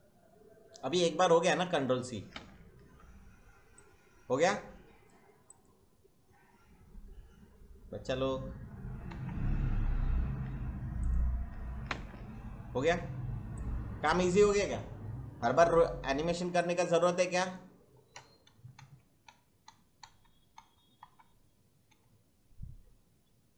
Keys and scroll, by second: 2.3 ctrl+v, 9.1 Left, 9.7 Right, 11.8 ctrl+v, 18.1 Right, 21.0 Left, 21.8 Right.